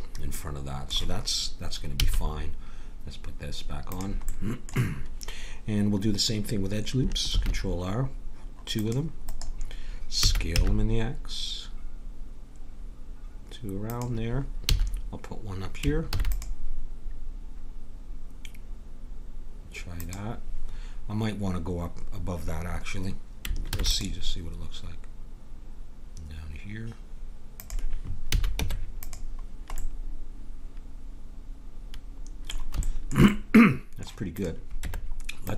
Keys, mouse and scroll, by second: 0.3-3.9 middle drag, 1.9 a, 3.9-5.7 drag, 7.3 ctrl+r, 10.2 s, 14.7 a, 16.1 ctrl+r, 23.7 ctrl+r, 28.2 a, 28.5 Tab, 29.8 middle click, 34.3-35.5 drag, 34.8 Tab.